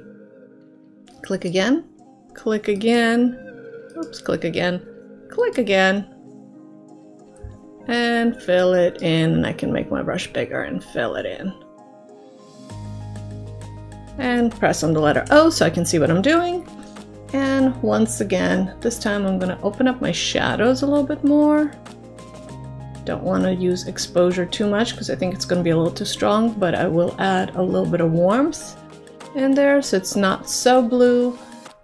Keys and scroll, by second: 15.3 o.